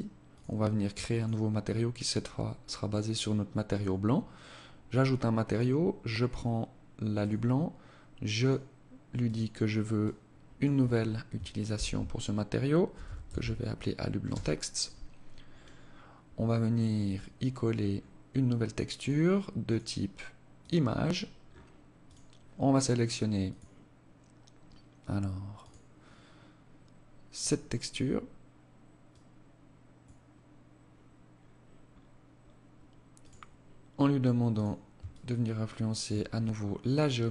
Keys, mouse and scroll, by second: 0.2 click, 2.7 click, 4.5 click, 7.5 click, 8.3 click, 16.1 click, 17.0-17.7 scroll up 2, 17.7 scroll up 1, 18.0 click, 18.7 click, 20.5 scroll down 5, 21.1 click, 29.1 click, 30.4-32.3 scroll down 9, 32.3 click, 33.6 click, 34.2 shift+click, 35.7-36.7 scroll up 12, 36.7-37.3 scroll down 5.